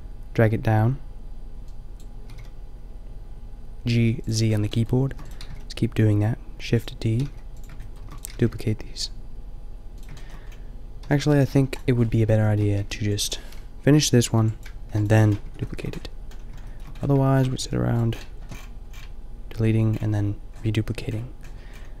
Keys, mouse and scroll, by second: 2.3 g, 4.1 click, 5.1 shift+d, 5.4 g, 7.2 g, 8.0 shift+d, 8.2-9.9 drag, 8.3 g, 10.2 middle click, 11.0 g, 11.3-12.8 drag, 11.6 Delete, 12.8 b, 14.2 b, 14.8 Delete, 15.4 Tab, 17.6 g, 18.0 click.